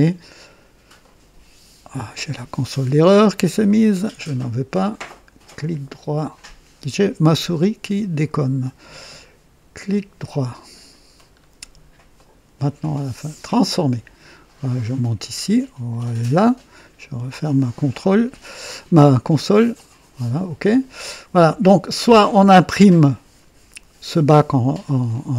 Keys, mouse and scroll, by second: 0.9 right click, 3.5 click, 5.4 right click, 8.1 click, 9.8 right click, 11.2-11.5 scroll down 1, 12.1 right click, 13.4 click, 14.9-16.3 drag, 17.5 click, 18.6-19.4 drag, 19.7 click, 20.6 click, 21.3 click, 23.0-23.7 drag, 25.0-25.3 drag.